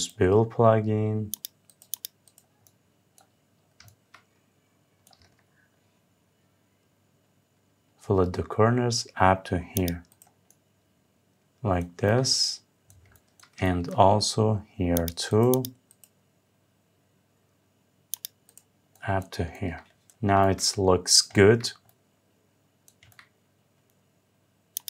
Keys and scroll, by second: 20.0 Escape.